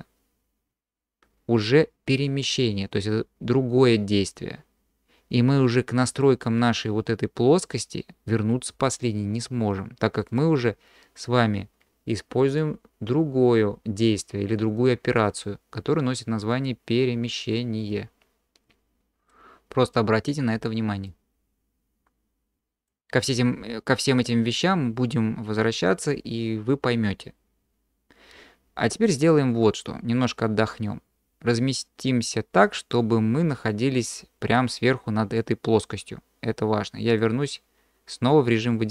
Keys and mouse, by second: 6.1 click, 10.3 click, 12.5-23.1 drag, 29.1 click, 29.6-30.7 drag, 31.5-33.0 drag, 33.0-33.4 middle drag, 33.4 click, 33.6 middle click, 33.6-34.0 drag, 33.8 middle drag, 34.0-34.6 middle drag, 37.2 middle click.